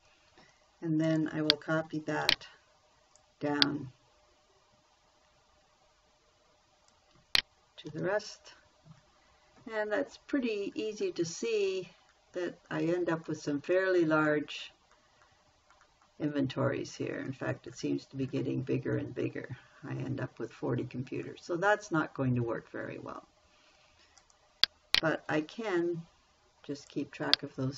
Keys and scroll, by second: 2.6 ctrl+c, 8.3 ctrl+v, 25.7 Escape.